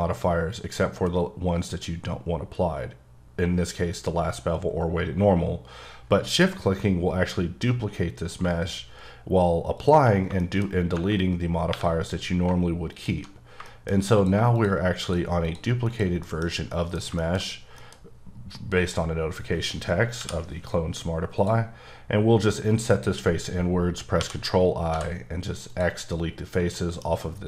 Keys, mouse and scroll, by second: 9.3 q, 9.7 shift+click, 10.4 shift+middle click, 10.6 shift+scroll up 1, 11.7 3, 12.9 alt+click, 13.7 shift+middle click, 14.1 click, 14.5 click, 15.0 shift+click, 15.4 shift+double click, 15.9 shift+click, 16.2 shift+middle click, 19.6-20.0 scroll up 1, 21.3 click, 24.4 i, 24.9 x, 25.7 click, 26.7 middle click.